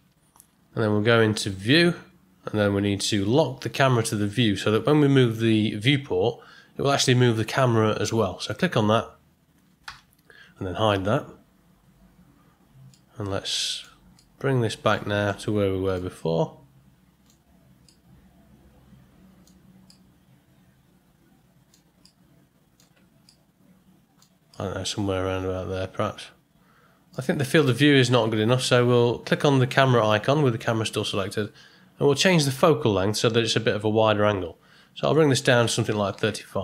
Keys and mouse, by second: 1.5 click, 8.4 click, 9.8 n, 12.9-13.8 middle drag, 14.1-14.9 ctrl+middle drag, 15.2-15.9 shift+middle drag, 16.1-17.3 ctrl+middle drag, 17.8-19.4 middle drag, 19.9-21.7 middle drag, 22.0-22.8 ctrl+middle drag, 23.2-24.2 shift+middle drag, 24.5-27.1 middle drag, 35.1-36.6 drag.